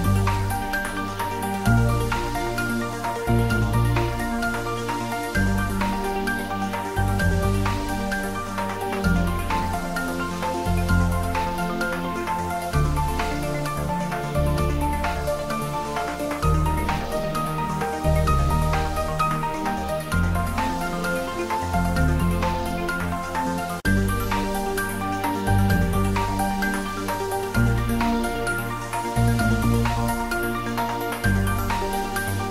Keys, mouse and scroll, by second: 1.2 click, 2.0 ctrl+z, 2.4 middle click, 3.1 ctrl+r, 3.7 click, 5.3 middle click, 5.9 ctrl+z, 7.2 Tab, 8.0 ctrl+z, 9.1 Tab, 9.6 ctrl+3, 10.3 shift+middle click, 10.8 ctrl+middle click, 11.3 Tab, 11.8 ctrl+r, 14.0 click, 14.0-15.0 typing, 15.6 click, 16.1 ctrl+r, 17.2 click, 17.5-18.8 typing, 20.4 click, 21.3 3, 21.4 click, 21.6 middle click, 22.0 click, 22.2 middle click, 23.0 shift+middle click, 23.6 shift+click, 24.4 s, 27.3 click, 27.5 middle click, 28.3 shift+middle click, 29.0 middle click, 29.8 s, 31.1 click, 31.3 shift+middle click, 31.7 ctrl+middle click.